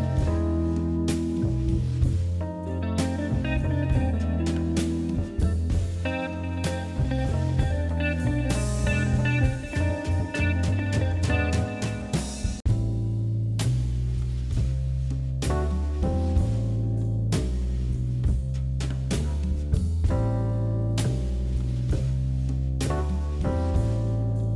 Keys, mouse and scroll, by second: 0.5 e, 1.4 g, 2.5 r, 3.2 s, 4.4 e, 5.5 g, 6.7 s, 8.1 e, 8.8 s, 9.8 g, 10.8-11.4 scroll down 4, 11.4-11.9 scroll up 3, 12.1 middle click, 12.4 scroll down 2, 12.8 click, 13.1 middle click, 13.3 middle click, 13.5 scroll up 2, 14.0 shift+click, 14.4 KP_1, 14.9-16.1 middle drag, 16.1 shift+click, 16.3 shift+click, 16.5-17.2 scroll down 4, 17.2 shift+click, 17.6 shift+click, 17.9 shift+click, 18.2 shift+click, 18.4 shift+click, 18.7 shift+click, 19.1 shift+click, 19.4 scroll down 1, 19.5 middle click, 19.8 scroll up 2, 20.4 KP_1, 20.8 scroll up 1, 21.1 middle click, 21.5 scroll up 2, 21.9 shift+click, 22.1 shift+click, 22.4 middle click, 22.8 KP_1, 23.2 scroll down 3, 23.4 middle click, 24.0 g.